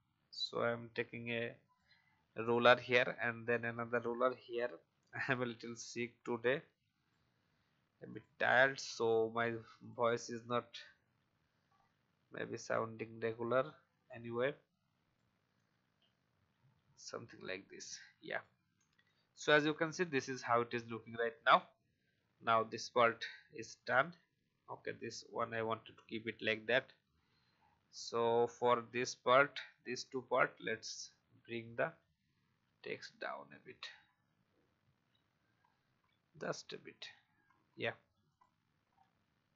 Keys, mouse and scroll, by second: 3.5 alt+click, 8.1 click, 10.9 shift+click, 11.6 alt+scroll up 1, 13.3-15.1 shift+drag, 15.8 shift+Right, 16.0 shift+Right, 16.6 shift+Right, 17.4 alt+scroll down 1, 18.2 click, 21.2 Delete, 25.6-26.0 alt+scroll down 1, 26.4-26.9 scroll up 1, 27.1-27.5 alt+scroll down 1, 27.9-28.4 scroll up 1, 28.4 click, 29.6 Down, 30.1 Down, 33.4 Down, 33.6 Down, 35.0 Up, 35.2 Up, 35.3 Up, 38.3 click, 38.8-39.5 scroll down 1.